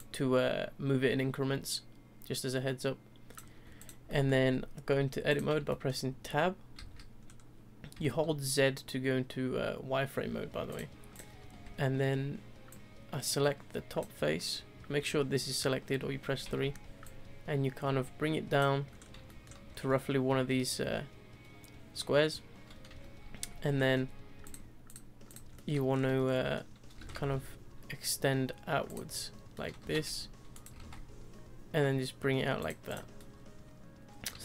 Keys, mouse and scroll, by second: 0.0 ctrl+click, 3.8 click, 4.1 middle drag, 4.4 Tab, 5.3 click, 5.7-6.8 shift+middle drag, 6.8 z, 7.2-7.9 scroll up 2, 7.9 z, 11.1 click, 11.5 3, 12.7 click, 17.0 ctrl+click, 19.0 scroll up 2, 19.2-19.7 shift+middle drag, 19.7-21.5 scroll up 3, 23.3 z, 23.8-24.4 middle drag, 24.4-25.5 drag, 25.5-25.9 middle drag, 25.9 scroll down 2, 26.2 scroll up 1, 26.3-26.9 middle drag, 26.9 s, 29.1-29.5 middle drag, 29.5 scroll down 2, 29.8 s, 30.7 s, 32.9 click, 33.2-34.4 middle drag.